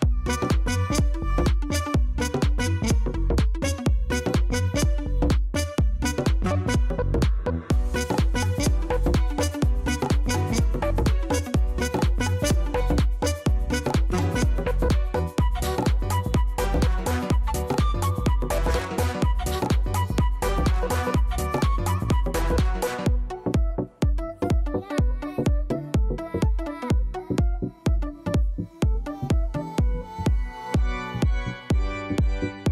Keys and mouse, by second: 0.4 click, 0.8 click, 1.3 click, 1.9 alt+right click, 2.1 alt+middle click, 2.3 alt+click, 2.8 alt+middle click, 4.5 ctrl+d, 6.5 click, 8.6 ctrl+d, 8.8 click, 9.4 click, 9.9 shift+click, 10.5 shift+right click, 11.2 right click, 11.9 click, 12.7 click, 13.7 click, 15.0 o, 15.1 Return, 15.1 c, 15.3 click, 15.4 Return, 15.5 right click, 15.6 click, 15.8 right click, 15.8 alt+middle click, 16.2 d, 17.3 click, 17.4 p, 17.7 click, 17.8 alt+middle click, 18.0 click, 18.7 alt+click, 18.8 alt+middle click, 19.1 click, 19.6 alt+click, 19.6 alt+right click, 19.7 alt+middle click, 20.9 click, 23.5 click, 23.9 click, 27.2 d, 28.0 click, 28.3 click, 31.4 Left.